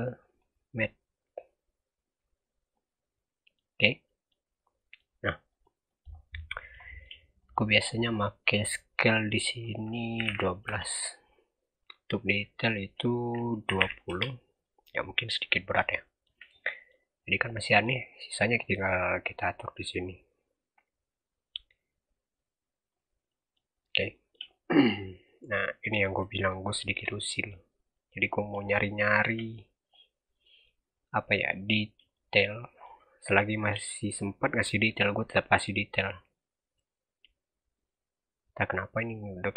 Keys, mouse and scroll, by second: 3.0-3.6 middle drag, 3.6-3.9 scroll up 1, 3.9 middle click, 4.5 scroll down 1, 4.7 middle click, 5.0-5.4 scroll up 5, 5.4 click, 5.7 middle click, 6.0-6.7 scroll up 4, 6.7 shift+middle click, 7.3 click, 11.7 click, 14.9-15.3 scroll up 3, 15.4 scroll down 2, 15.5 middle click, 16.4 scroll down 1, 16.6-17.1 middle drag, 17.1 scroll down 1, 17.2-17.8 middle drag, 17.8-18.7 scroll up 5, 18.7-19.3 scroll up 1, 19.3 click, 23.2-23.6 middle drag, 23.6-25.0 scroll up 7, 24.0-24.4 shift+middle drag, 25.0 scroll down 4, 25.2-27.0 middle drag, 27.0-27.9 scroll up 2, 27.1 middle click, 27.9-30.8 middle drag, 30.8 scroll down 1, 31.0-31.6 middle drag, 31.6-32.0 scroll up 2, 32.0-32.9 shift+middle drag, 32.9-33.3 scroll up 2, 33.3-33.8 shift+middle drag, 33.8-34.5 scroll up 2, 34.5-35.6 middle drag, 35.6-36.7 scroll up 2, 36.7 click.